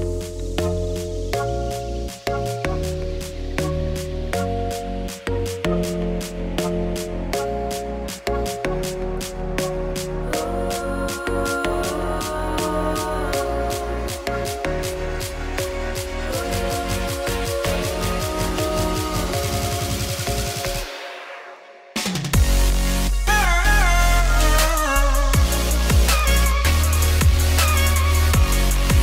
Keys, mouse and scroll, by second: 1.4 click, 2.3 middle click, 2.3-3.1 scroll up 1, 3.1 Tab, 4.2-7.6 middle drag, 7.6 2, 8.7-9.5 scroll up 1, 9.5-11.3 middle drag, 11.3 scroll up 1, 11.6-12.3 scroll down 2, 12.3-12.6 scroll down 1, 12.6 alt+shift+click, 13.1-14.7 middle drag, 14.9 shift+middle click, 15.0-16.0 scroll down 8, 16.0-16.7 scroll down 1, 16.3 middle click, 16.7 middle click, 17.6 click, 18.6 middle click, 18.9-21.1 middle drag, 21.1 click, 23.6 click, 24.1-26.2 drag, 27.6 ctrl+shift+t.